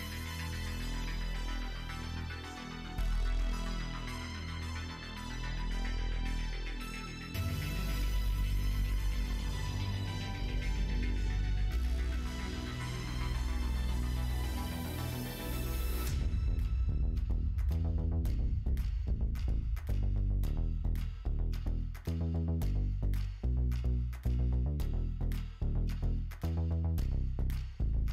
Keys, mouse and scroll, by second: 0.0 click, 0.9 2, 2.3 alt+click, 2.7 q, 3.3 Tab, 3.9 Tab, 4.5 Tab, 4.8 alt+z, 5.1 click, 5.6 middle click, 7.0 middle click, 7.7 middle click, 8.1 shift+middle click, 9.0 shift+middle click, 9.8 middle click, 10.4 middle click, 10.9 shift+middle click, 11.3 middle click, 12.2 shift+middle click, 12.8-14.1 middle drag, 14.6 middle click, 15.2 click, 17.8 click, 18.9 middle click, 20.1 middle click, 20.5 shift+middle click, 20.9 middle click, 21.4 shift+middle click, 22.1 middle click, 22.4-23.4 middle drag, 23.7 shift+middle click, 24.1 middle click, 25.0 shift+middle click, 25.6 middle click, 26.1 middle click, 26.5 middle click, 27.4 middle click, 27.8-28.1 middle drag.